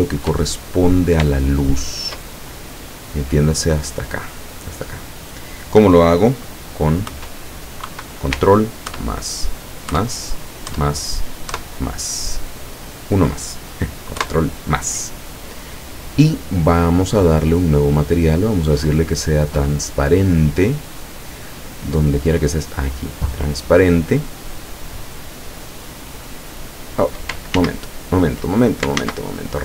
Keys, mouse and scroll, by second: 0.6 shift+middle click, 1.5 shift+middle click, 2.4-3.0 shift+scroll up 3, 7.2 KP_Add, 7.9 KP_Subtract, 9.0 ctrl+KP_Add, 10.0 ctrl+KP_Add, 10.7 ctrl+KP_Add, 11.6 ctrl+KP_Add, 14.2 ctrl+KP_Add, 18.4 click, 22.8 click, 27.6 ctrl+z, 29.1 ctrl+z.